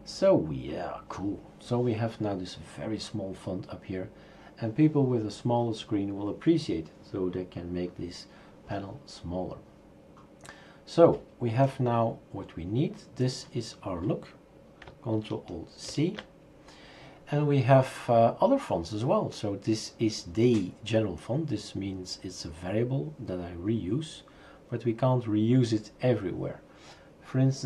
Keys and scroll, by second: 15.9 ctrl+c.